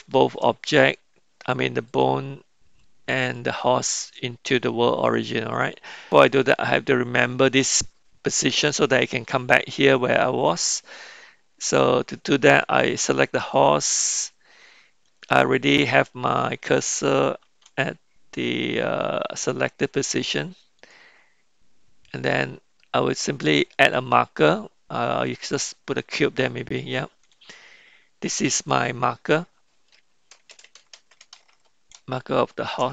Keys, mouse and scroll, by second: 2.0 click, 3.2 shift+click, 13.4 click, 17.4 shift+s, 23.0-25.6 drag, 28.3 click, 28.7-32.9 drag.